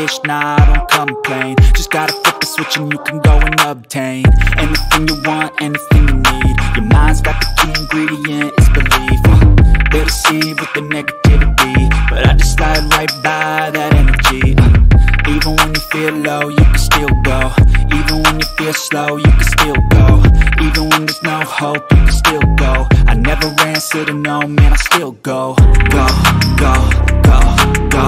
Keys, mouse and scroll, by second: 7.5 click, 8.9 click, 12.0 click, 17.1 click, 25.7 click, 26.2 click, 27.7 click.